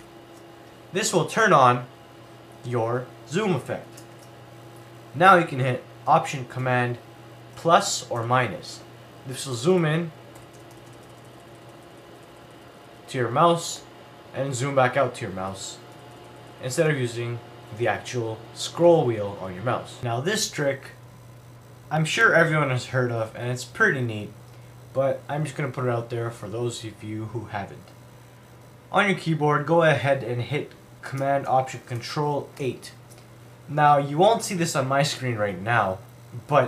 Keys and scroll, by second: 0.0 alt+super+8, 6.0 alt+super+8, 7.6 alt+super+=, 8.2 alt+super+-, 9.6 alt+super+=, 13.8 alt+super+-, 16.0 alt+super+=, 16.9 alt+super+-, 17.8 alt+super+=, 18.9 alt+super+-, 32.6 ctrl+alt+super+8.